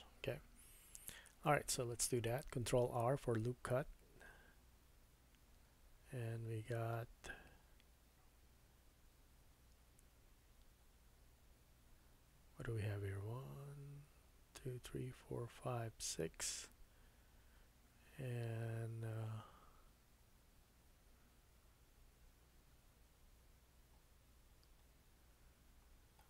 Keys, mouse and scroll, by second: 0.6 Tab, 2.6 ctrl+r.